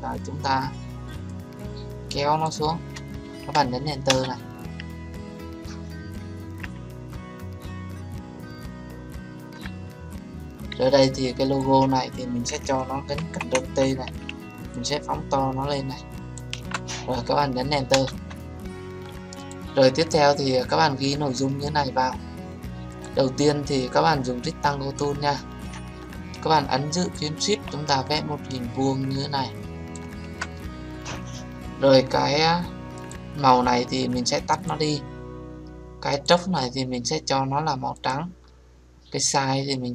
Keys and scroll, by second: 2.8 ctrl+t, 4.0 Return, 13.1 ctrl+t, 17.9 Return.